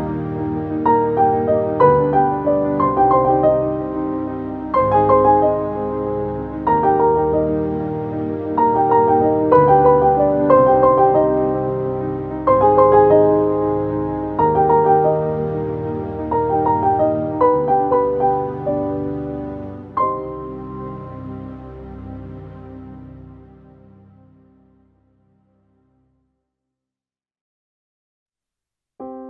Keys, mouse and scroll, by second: 0.0 Right, 0.7 click, 1.1 Left, 2.8 click, 3.3 right click, 4.5 click, 7.8 right click, 8.6 click, 9.4 ctrl+z, 10.0 ctrl+shift+z, 10.5 ctrl+space, 10.6 ctrl+click, 10.9 ctrl+space, 11.7 click, 11.9 space, 12.3 v, 14.6 click, 19.2 v, 20.4-29.2 drag.